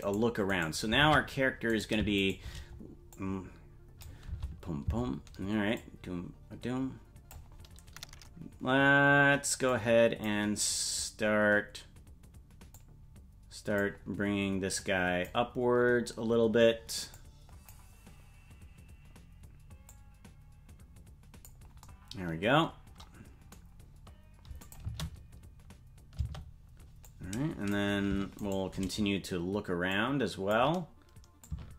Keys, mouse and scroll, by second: 0.2 right click, 1.1 ctrl+Tab, 1.8 right click, 2.3 shift+right click, 3.1 click, 4.2 space, 5.8-7.4 drag, 9.7 click, 12.7-13.8 drag, 14.8 click, 17.1 click, 19.9-21.5 drag, 24.6 click, 24.8 space, 26.8 space, 27.0 click, 28.5 shift+right click, 29.9 click, 31.4-31.7 drag.